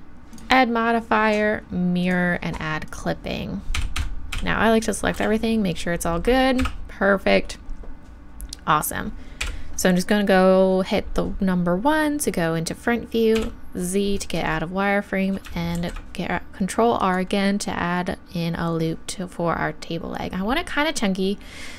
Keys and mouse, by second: 0.3-4.8 drag, 3.7 a, 4.0 a, 5.2 g, 9.4 KP_1, 13.4 z, 15.7 ctrl+r.